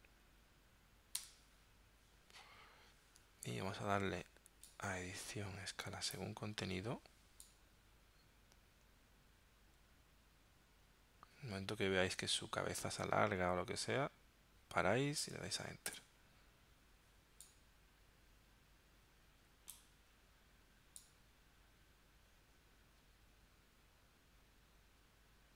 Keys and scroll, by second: 1.2 Return, 16.0 Return.